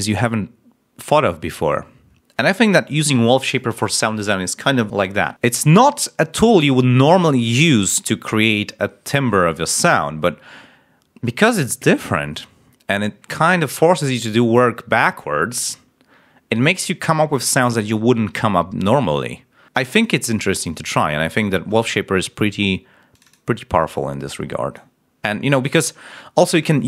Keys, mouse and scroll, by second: 23.0 click, 24.2 click.